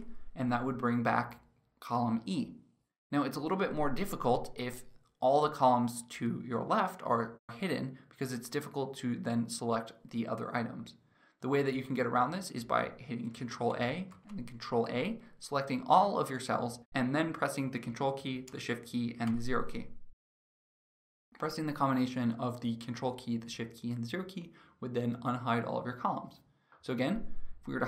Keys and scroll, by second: 13.2 ctrl+a, 18.9 ctrl+shift+0.